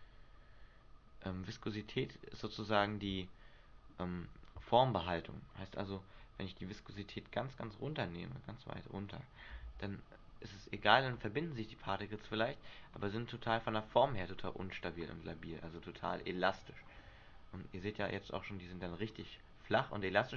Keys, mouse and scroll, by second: 2.9 middle click, 4.4 Escape, 5.9 click, 9.8 alt+a, 13.7 middle click, 14.5-15.1 scroll up 3, 17.2 middle click.